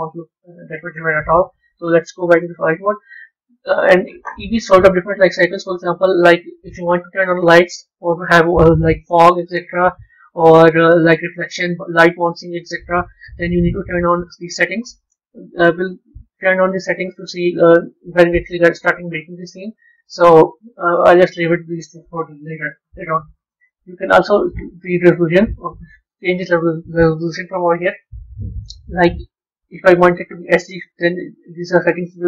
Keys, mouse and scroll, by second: 0.3 z, 15.3-16.9 scroll down 7, 16.9-18.7 scroll up 5, 23.4 click.